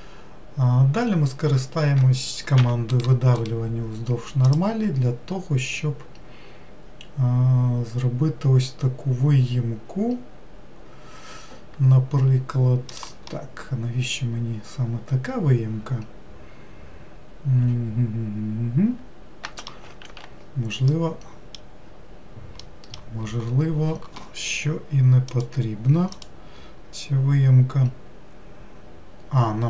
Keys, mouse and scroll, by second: 2.6 e, 3.4-13.3 right drag, 13.3-16.3 middle drag, 20.0 ctrl+z, 20.9-25.7 middle drag.